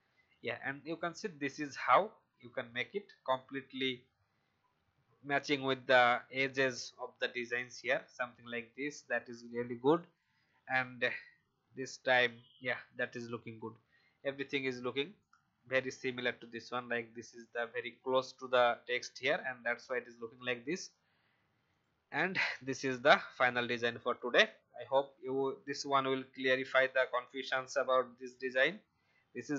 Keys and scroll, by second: 28.1 shift+x, 28.9 ctrl+shift+x, 29.4 ctrl+shift+b.